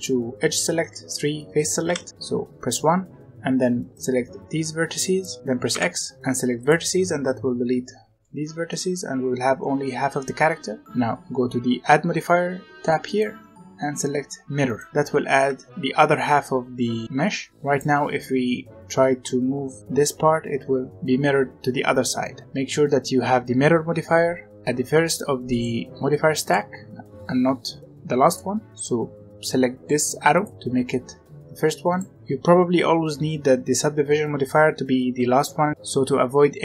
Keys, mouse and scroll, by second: 0.7 3, 1.8 1, 1.9-3.2 right drag, 3.2 b, 5.6 x, 6.4 right click, 6.9 middle click, 7.9 z, 8.1-11.9 middle drag, 13.0-14.9 drag, 15.2-16.6 middle drag, 17.5 scroll up 1, 17.6 click, 18.4 g, 25.4 click, 26.3 click, 30.3 click, 31.8 click.